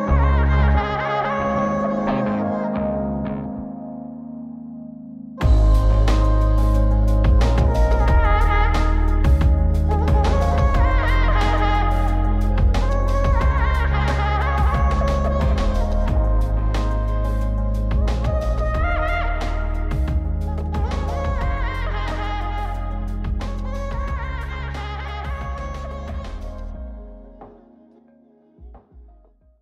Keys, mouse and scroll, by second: 0.0-2.2 drag, 2.7-7.9 drag, 8.4-10.7 drag, 11.0-13.8 drag, 14.6-16.7 drag, 17.8 shift+space, 21.1-23.9 drag, 24.1-26.5 drag.